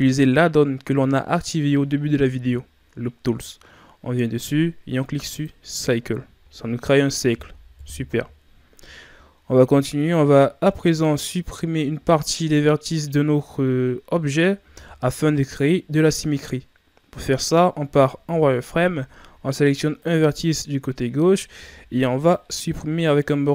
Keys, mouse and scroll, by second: 7.7 KP_1, 9.3-9.8 ctrl+scroll down 1, 9.8 shift+scroll up 2, 11.7-13.2 ctrl+scroll down 1, 17.6-18.1 shift+scroll up 1, 18.1 z, 18.2 z, 20.0 right click, 21.6 b, 22.5 b.